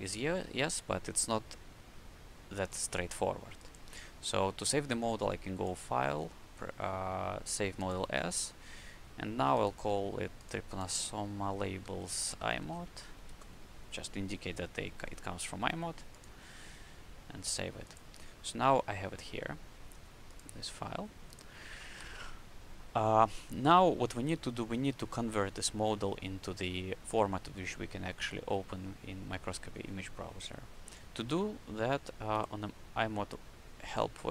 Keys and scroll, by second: 11.4 Right, 11.7-13.1 typing.